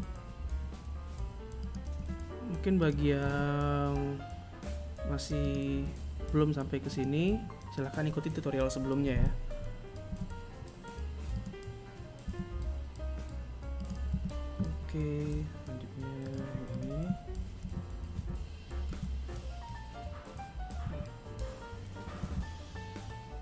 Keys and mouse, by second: 0.0 r, 1.3 s, 3.8 g, 8.2 e, 10.3 s, 12.0 a, 14.2 right click, 14.7 shift+right click, 15.5 KP_3, 16.1 KP_1, 16.9 KP_3, 18.8 KP_1, 20.2 e, 22.6 z.